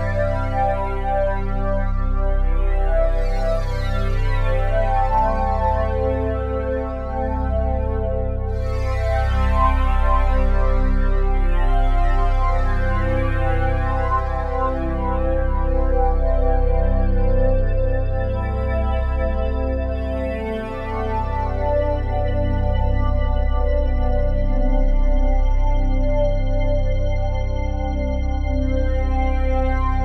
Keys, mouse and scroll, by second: 2.8 super+d, 4.6-7.8 drag, 9.5 click, 11.2-15.0 drag, 15.0 ctrl+c, 15.8-28.4 drag, 28.9-30.0 drag.